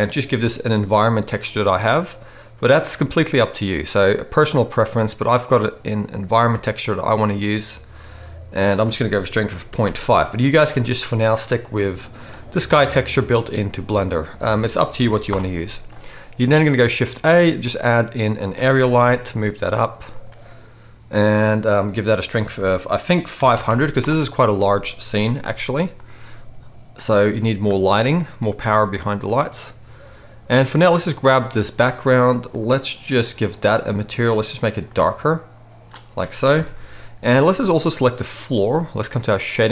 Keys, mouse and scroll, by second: 1.4 middle click, 1.9-6.7 drag, 6.6 middle click, 6.6-10.1 right drag, 8.5-10.1 drag, 8.5-17.0 middle drag, 17.0 shift+a, 18.9 g, 20.2-21.5 right drag, 21.9 right click, 23.6 0, 25.1 g, 26.0 right click, 26.9-31.1 middle drag, 31.1-32.5 right drag, 32.5-33.4 middle drag, 33.4 click, 33.6-34.3 middle drag, 34.3-39.7 right drag, 36.5 KP_0, 38.0 click, 38.0 middle click.